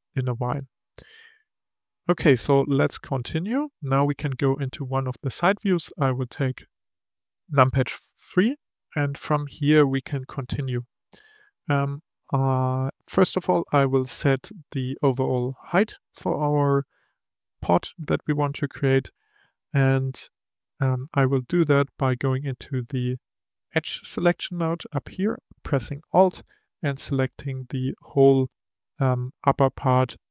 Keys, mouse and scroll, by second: 0.1-2.0 middle drag, 2.0-2.8 scroll down 5, 2.8-4.9 middle drag, 4.9 KP_3, 9.9 scroll up 2, 12.6-15.7 scroll up 1, 23.7-26.4 drag, 28.0-30.3 middle drag.